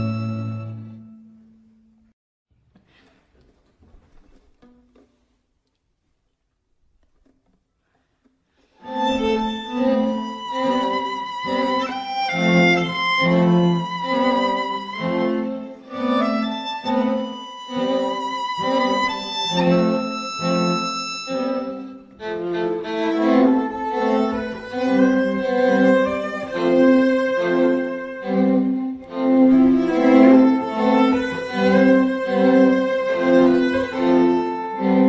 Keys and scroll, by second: 26.4 t.